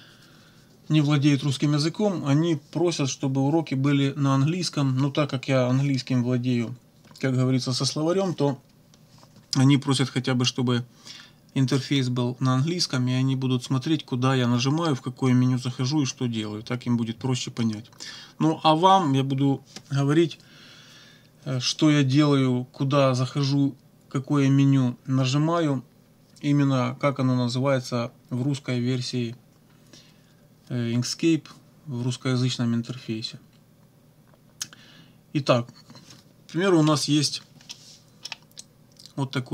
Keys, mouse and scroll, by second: 37.7 middle click, 38.6-39.5 drag.